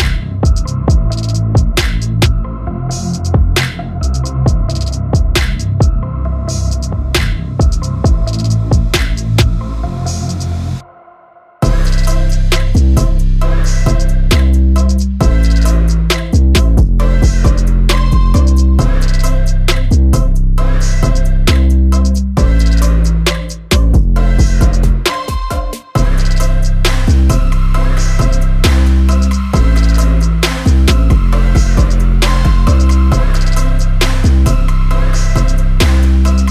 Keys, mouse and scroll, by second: 5.7-8.4 shift+drag, 9.5 click, 11.7-16.4 drag.